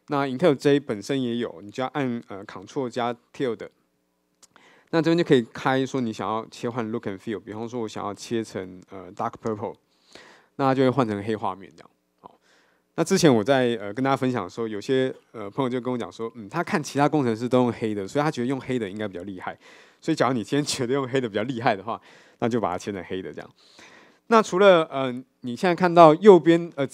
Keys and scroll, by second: 3.8 ctrl+`, 22.7 ctrl+`.